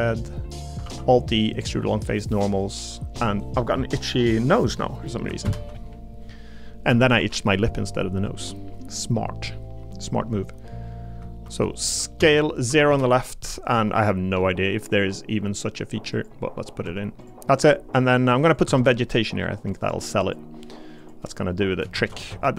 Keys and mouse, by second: 0.5 click, 0.8 alt+e, 2.6 click, 5.4 ctrl+KP_Add, 6.9 a, 7.2 g, 8.3 click, 12.2 s, 12.7 0, 12.9 Return, 13.7 g, 16.1 click, 16.6 middle click, 16.8 Tab, 17.8 middle click, 18.1 middle click, 18.5 click, 18.7 Tab, 19.8 click, 21.0 click, 21.9 shift+d, 22.3 s.